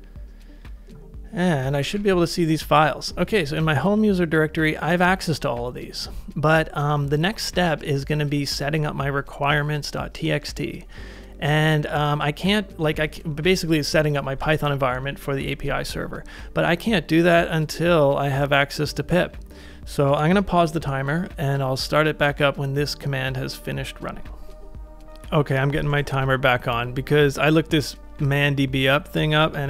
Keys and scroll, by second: 1.5-2.3 typing, 29.4 ctrl+a.